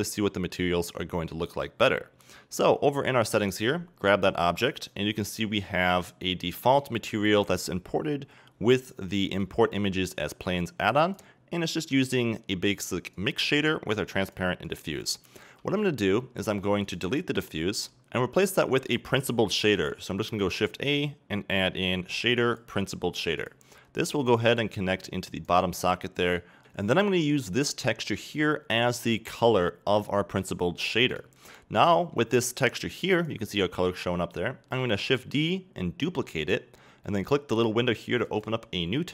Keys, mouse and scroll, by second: 3.4 right click, 6.8-8.4 right drag, 9.4-16.9 drag, 17.6 x, 25.5-26.5 drag, 26.6-38.5 drag, 34.8 shift+d.